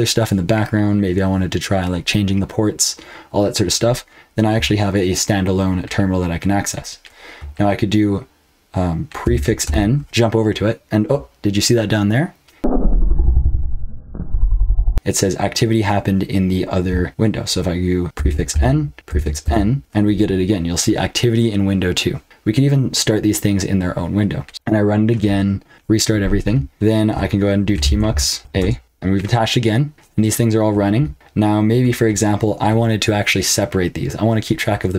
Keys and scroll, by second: 9.2 ctrl+b, 9.6 n, 18.1 ctrl+b, 18.5 n, 19.0 ctrl+b, 19.4 n, 24.5 ctrl+c, 24.5 ctrl+d, 24.5 ctrl+p, 24.5 Return, 27.5-28.9 typing.